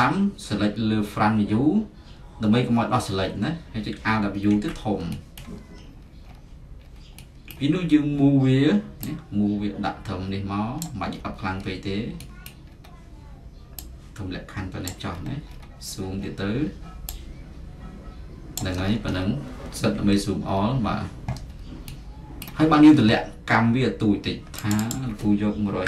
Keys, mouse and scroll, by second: 0.0-2.1 right drag, 2.3-4.2 middle drag, 4.4 alt+w, 5.4-9.6 middle drag, 5.7-7.0 scroll, 7.5 scroll, 10.8 click, 11.1-14.9 middle drag, 14.9 click, 15.2-18.4 middle drag, 15.2-17.6 scroll, 18.6 click, 19.0-20.1 middle drag, 19.0-19.3 scroll, 20.0 z, 20.6-24.6 middle drag, 24.8-25.8 drag, 25.6-25.8 typing.